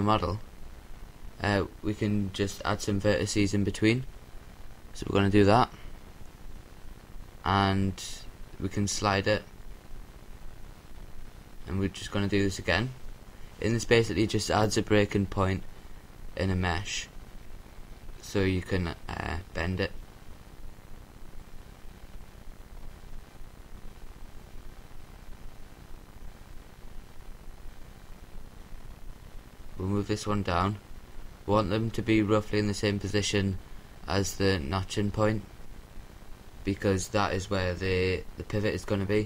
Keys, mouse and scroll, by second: 0.3 ctrl+z, 2.4-4.0 drag, 8.7-10.6 middle drag, 10.6-12.9 drag, 19.7-24.0 middle drag, 24.0 a, 24.5 c, 26.0-28.1 right drag, 27.4-28.8 drag, 30.2 a, 30.2 c, 31.7-33.3 right drag, 32.6-34.0 drag, 34.7 a, 35.6-38.2 middle drag.